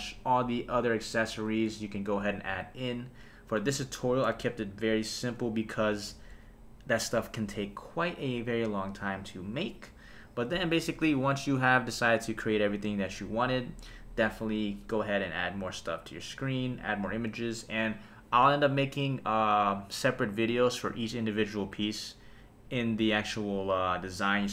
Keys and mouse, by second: 6.0 super+s, 11.1 KP_0.